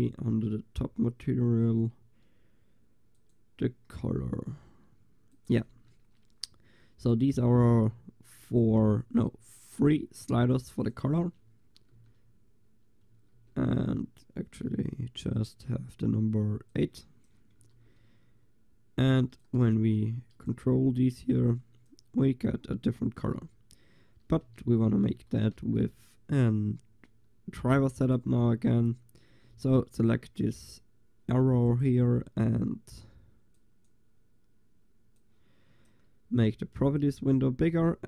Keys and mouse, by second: 0.1-2.0 drag, 3.2-5.0 drag, 5.4-12.7 drag, 12.1 shift+z, 13.4 shift+z, 16.8 click, 16.9 click, 17.9 shift+z, 18.0-21.2 drag, 19.8 Tab, 23.5 Tab, 24.5 z, 24.9 z, 25.3 click, 25.6 Tab, 28.1-28.5 drag, 28.5-29.2 right drag, 29.2-29.5 drag, 29.5 g, 33.6-38.0 drag.